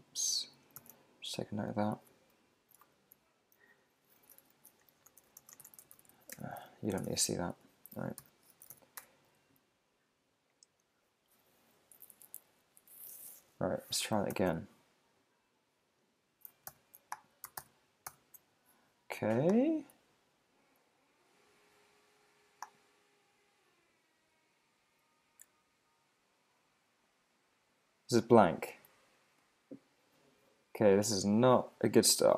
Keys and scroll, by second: 0.9 super+w, 1.3 super+Tab, 2.8 super+`, 5.6 shift+f, 6.9 super+v, 7.0 super+Tab, 8.2 super+l, 9.0 Return, 14.3 alt+super+i, 16.7 alt+super+i.